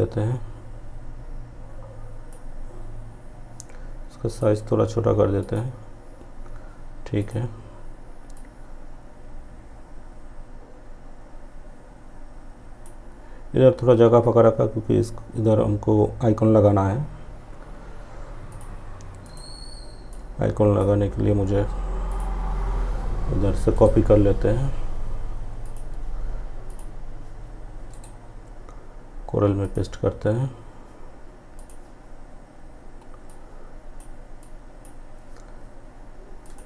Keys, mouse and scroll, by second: 3.4-14.2 drag, 17.6-21.1 drag, 22.8 right click, 24.7 click, 26.9 right click, 28.7-35.5 drag.